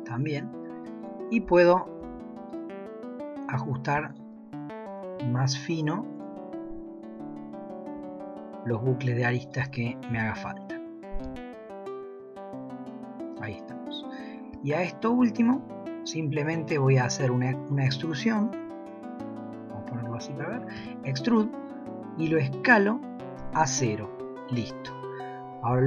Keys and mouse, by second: 1.0 alt+click, 2.5 alt+click, 4.1 alt+click, 5.0 s, 8.0 s, 10.1 g, 14.6 shift+middle click, 16.5 middle click, 18.6 KP_4, 19.5 KP_1, 20.8 e, 25.7 g.